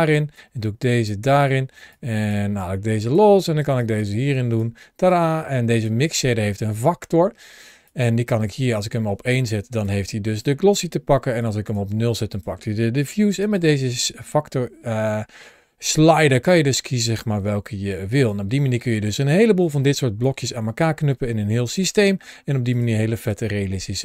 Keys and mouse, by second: 0.2-0.9 drag, 1.8 click, 1.9 drag, 2.9 click, 3.6-4.5 drag, 4.9 click, 5.1 click, 7.7-9.7 drag, 10.3 click, 10.5 click, 11.3 click, 12.2 click, 13.0 g, 13.9-18.2 drag, 19.4 middle click, 19.8 drag, 20.4 g, 22.6 click, 22.8 g.